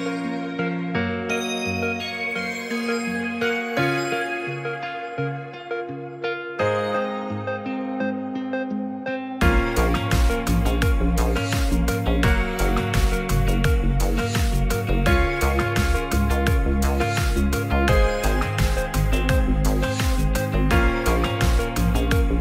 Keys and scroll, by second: 12.5 [.